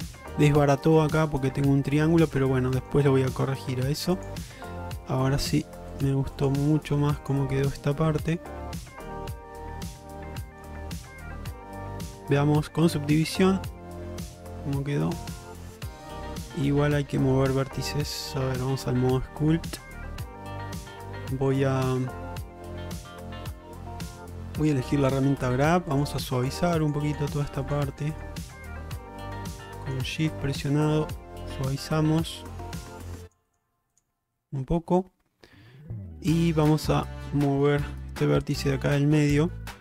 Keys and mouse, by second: 0.1 middle click, 1.9 middle click, 2.8 shift+middle click, 3.2 middle click, 5.2 g, 6.7 g, 7.6 middle click, 8.5 g, 9.7 click, 10.1 g, 10.9 click, 11.4 g, 13.5 click, 14.6 click, 15.0-17.4 middle drag, 17.8 ctrl+Tab, 19.3 middle click, 19.8 shift+middle click, 20.1 middle click, 22.8 q, 24.9 click, 25.7 shift+click, 26.0 shift+click, 26.2 shift+click, 26.5 shift+click, 26.7 shift+click, 26.9 shift+click, 27.1 shift+click, 27.4 shift+click, 27.7 shift+click, 28.0 shift+click, 28.2 shift+click, 28.5 shift+click, 28.8 shift+click, 29.3 shift+click, 29.5 shift+click, 29.7 shift+click, 29.9 shift+click, 30.3 middle click, 31.1-32.7 middle drag, 33.3 shift+click, 33.5 shift+click, 34.0 shift+click, 34.4-36.7 middle drag, 37.8 Tab, 38.5 click, 38.8 middle click.